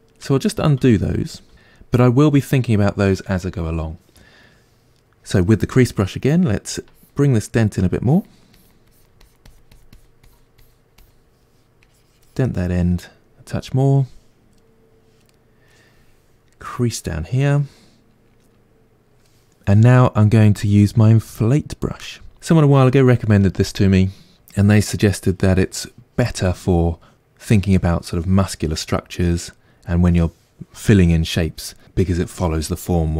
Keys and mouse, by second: 0.5 ctrl+z, 6.8-13.1 ctrl+drag, 13.1-16.7 middle drag, 16.7 click, 17.6-22.3 middle drag, 22.3-33.1 drag.